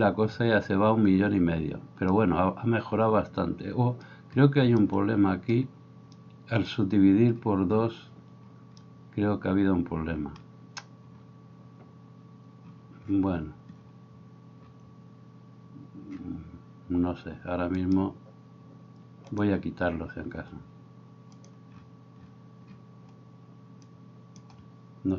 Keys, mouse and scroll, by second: 17.9 middle click, 17.9 right click, 19.4-21.4 middle drag, 21.4-25.1 drag.